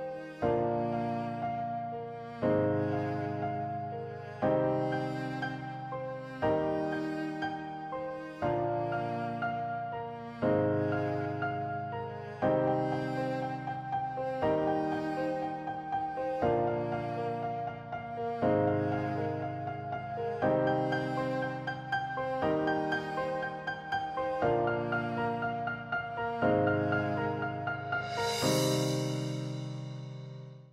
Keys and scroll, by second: 0.4 s, 1.8 g, 3.6 alt+z, 4.0 alt+Tab, 4.1 a, 5.7 ctrl+shift+j, 5.8 ctrl+Return, 6.0 Tab, 6.2 a, 6.7 Tab, 7.2 7, 8.5 z, 9.1 shift+z, 9.8 ctrl+shift+j, 9.9 ctrl+Return, 10.0 Tab, 10.3 alt+z, 10.8 alt+a, 12.9 alt+shift+w, 13.4 w, 14.0 7, 14.4 Tab, 16.1 Tab, 16.3 a, 16.9 Tab.